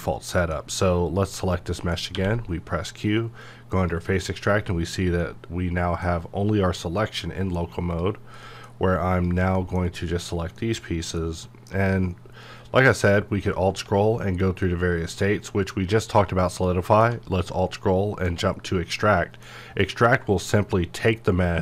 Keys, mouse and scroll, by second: 0.0 middle click, 1.1 click, 1.5 middle click, 2.1 q, 3.4-5.2 drag, 5.2-7.9 middle drag, 7.9 click, 8.4 middle click, 9.1 click, 9.6 middle click, 10.1 click, 10.6 middle click, 11.2-11.7 scroll down 1, 12.8 alt+scroll down 1, 14.1 alt+scroll down 1, 16.7-17.9 middle drag, 17.9-18.4 alt+scroll up 1.